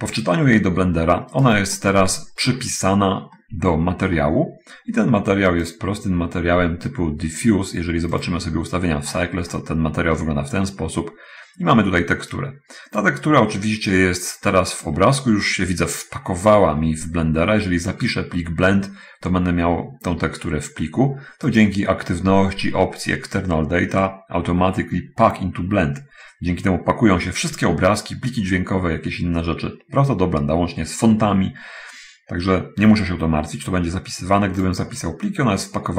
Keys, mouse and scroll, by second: 1.5 right click, 2.1-3.7 middle drag, 8.6 click, 9.3-10.2 scroll up 1, 10.5-11.9 middle drag, 12.8-13.3 drag, 21.8 click, 34.9 click.